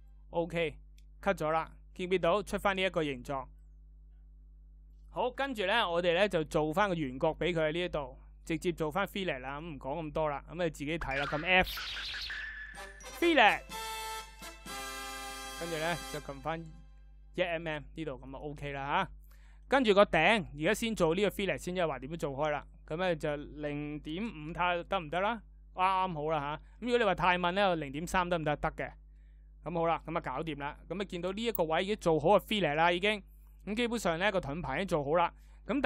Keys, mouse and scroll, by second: 11.0 f, 23.3 f.